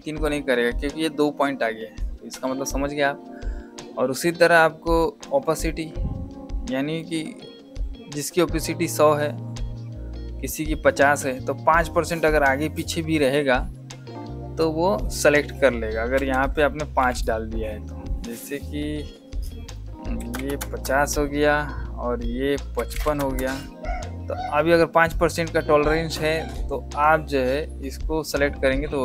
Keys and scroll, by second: 24.1 KP_Enter.